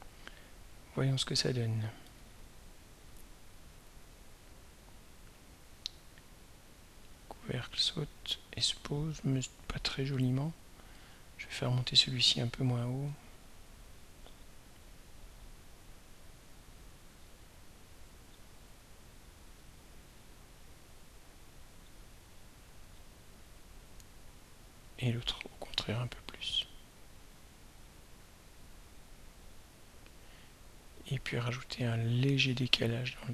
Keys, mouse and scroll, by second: 1.0 click, 2.6-12.0 drag, 15.9-18.4 drag, 19.3 shift+click, 22.4 shift+click, 24.7 click, 26.5 shift+click, 30.3-33.3 drag.